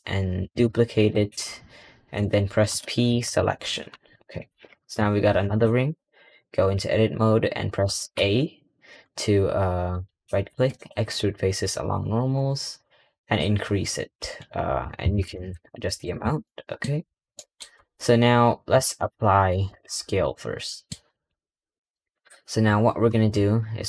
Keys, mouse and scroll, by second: 4.2 click, 9.9-13.0 right drag, 17.6-20.5 middle drag, 22.0-22.5 middle drag.